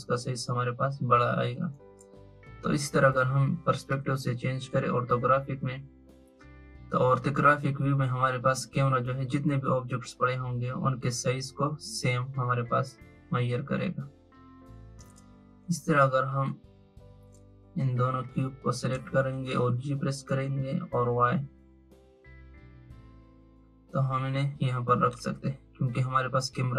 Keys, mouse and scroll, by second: 3.8-6.9 drag, 13.6-15.6 drag, 16.3 click, 18.1 shift+click, 19.8 g.